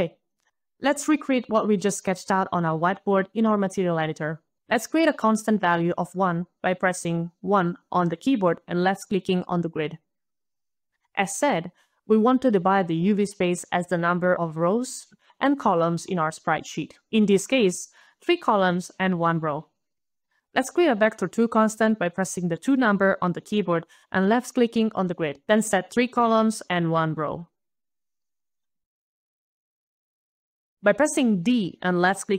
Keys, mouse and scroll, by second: 0.0-0.6 1, 7.7-8.0 typing, 7.7 click, 7.8 click, 9.3 click, 9.5 click, 9.8 1, 10.3 Return, 10.8 click, 12.6 click, 14.1-14.9 scroll down 5, 15.2 scroll, 16.0 click, 16.0 scroll down 2, 16.1 click, 20.2 click, 22.1-23.1 typing, 22.8 click, 22.9 click, 23.5 click, 25.8 click, 26.1 click, 26.6 3, 27.5 click, 29.5-31.7 typing, 29.6 click, 29.7 click, 29.9 click, 30.0 click, 32.0 click.